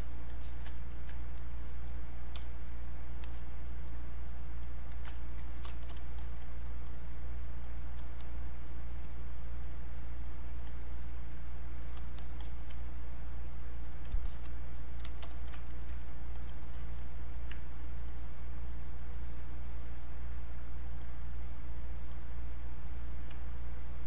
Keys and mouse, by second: 0.8 ctrl+right click, 1.6 ctrl+click, 2.4 ctrl+space, 2.7 ctrl+click, 2.9 ctrl+space, 3.5 ctrl+click, 5.2 ctrl+right click, 5.5-15.3 drag, 15.7 ctrl+right click, 16.3 alt+click, 18.1-22.1 ctrl+drag, 22.3 ctrl+middle click.